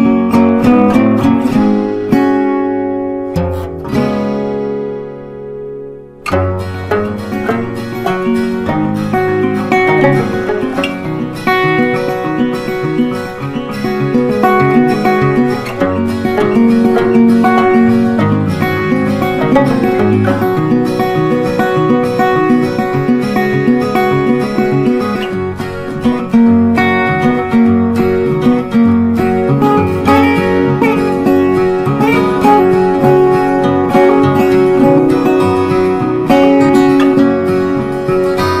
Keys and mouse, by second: 4.7 Up, 6.8 click, 9.4-17.4 drag, 18.4-29.8 drag, 31.3-38.6 drag.